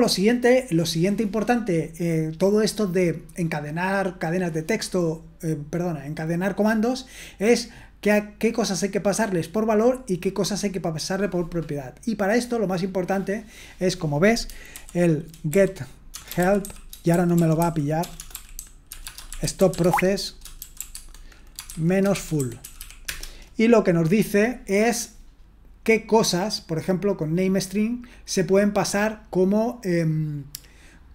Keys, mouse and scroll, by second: 0.9-10.4 scroll up 1, 10.4-13.7 scroll up 1, 13.7-14.7 drag, 14.7-23.3 typing.